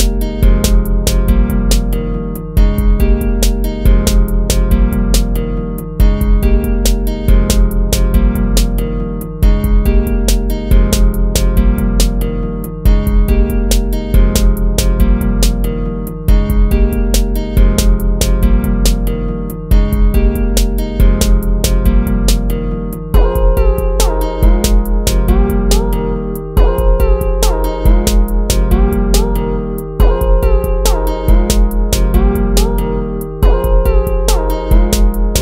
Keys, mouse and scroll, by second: 1.9 ctrl+-, 3.6 ctrl+-, 4.0 ctrl+-, 7.2 ctrl+-, 15.3 ctrl+-, 18.1 ctrl+-, 18.4 ctrl+z, 20.1 right click, 20.9 ctrl+z, 24.2 ctrl+z, 24.4 ctrl+z, 31.0 ctrl+-, 33.1 ctrl+z.